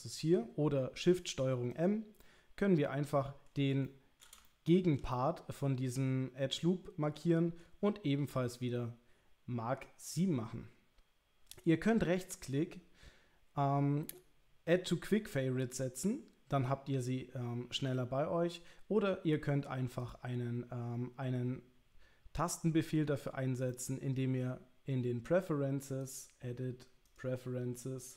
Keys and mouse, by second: 3.9 shift+middle click, 4.4 ctrl+middle click, 5.1-7.6 middle drag, 8.6-22.3 middle drag, 23.8 middle click, 26.0-27.3 drag.